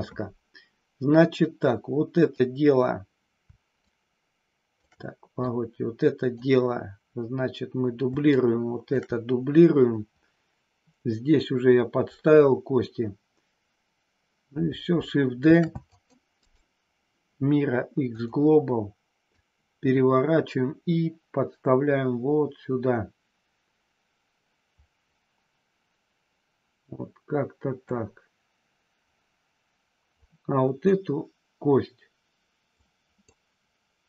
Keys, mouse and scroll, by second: 1.4-2.4 drag, 4.0 shift+click, 5.5 click, 8.5 shift+click, 15.5 shift+d, 15.8 click, 16.4-18.2 right drag, 19.2-27.8 drag, 30.1 click, 32.7 click.